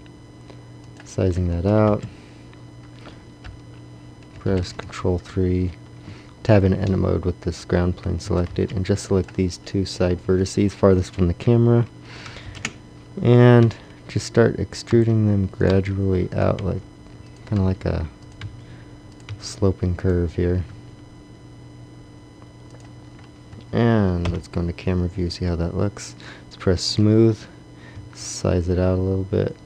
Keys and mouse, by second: 1.4 click, 1.8 KP_1, 3.4 KP_1, 3.4 KP_3, 3.6 KP_3, 4.4 ctrl+KP_3, 6.1 Tab, 8.2 Tab, 8.2 a, 8.4 b, 12.4 ctrl+KP_3, 13.6 e, 14.9 e, 15.6 e, 15.7 e, 16.6 e, 17.6 e, 18.5 e, 19.3 e, 20.6 e, 21.7 e, 23.5 Tab, 24.2 KP_0, 27.9 s.